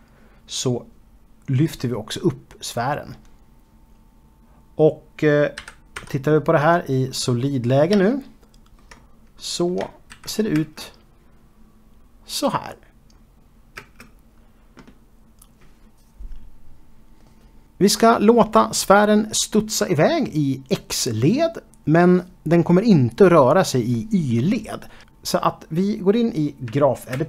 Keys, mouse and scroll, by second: 4.2 scroll down 4, 8.8-9.2 typing, 9.9 middle click, 10.5-11.1 scroll down 2, 11.2-12.8 shift+middle drag, 13.8 space, 14.9-16.7 scroll down 2, 17.0 space, 25.1 ctrl+space.